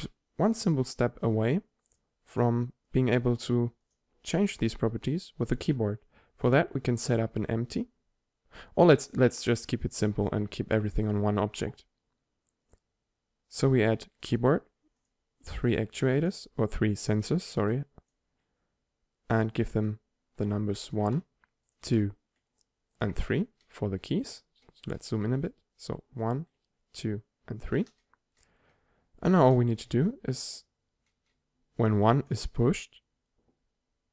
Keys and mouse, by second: 2.0-5.9 drag, 6.9 shift+a, 12.7-14.5 drag, 14.7-18.2 drag, 20.9-34.1 drag.